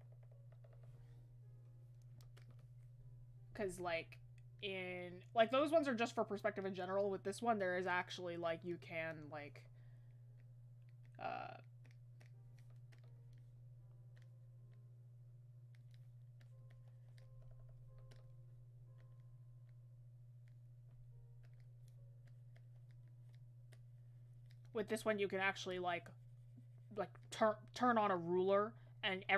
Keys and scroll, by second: 17.4 ctrl+z.